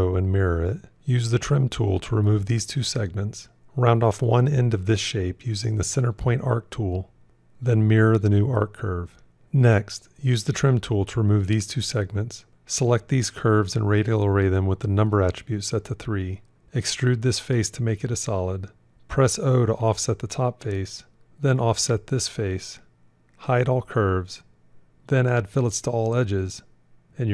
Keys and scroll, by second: 7.2 alt+x, 19.2 o, 23.4 h.